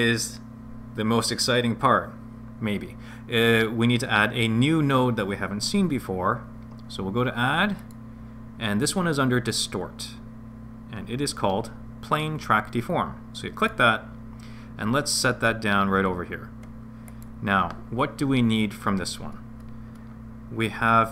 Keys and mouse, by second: 7.8-17.3 drag.